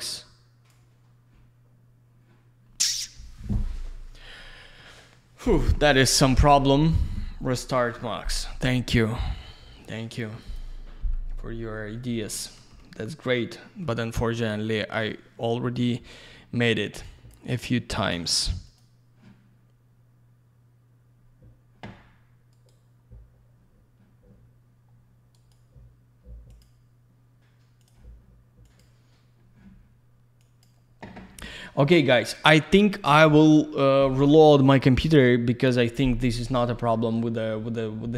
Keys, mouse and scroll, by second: 0.0 click, 10.4 click, 10.6 click, 17.0 ctrl+shift+click, 18.7 click, 18.8 click, 36.4 click, 36.5 click.